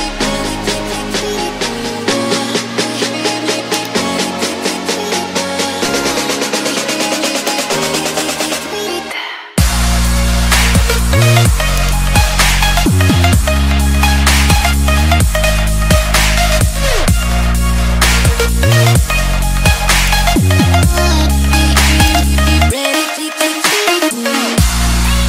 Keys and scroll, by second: 14.2 ctrl+d, 18.2 alt+Tab.